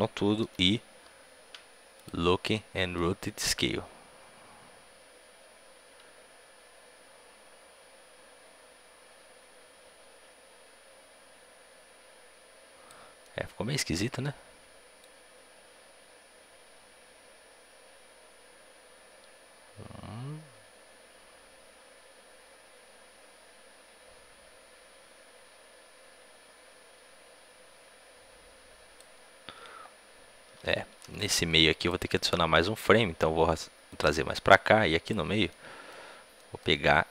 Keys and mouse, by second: 1.9 i, 2.4-5.0 middle drag, 3.5-5.2 drag, 13.2-15.0 middle drag, 15.0-16.7 drag, 32.7 a, 32.7 b, 32.7 g, 34.2-36.3 drag, 36.3-37.1 middle drag.